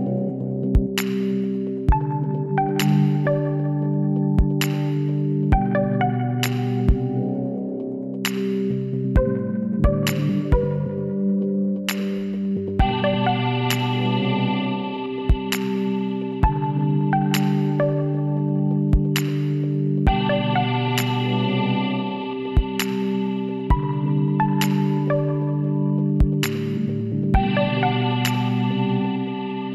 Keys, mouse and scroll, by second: 1.2-4.8 right drag, 4.8 x, 8.2 z, 8.7 z, 9.6 middle click, 10.2 middle click, 10.6-11.7 middle drag, 11.7-24.8 right drag, 24.0 x, 25.2-26.9 middle drag, 27.6-29.4 middle drag, 29.4 ctrl+z.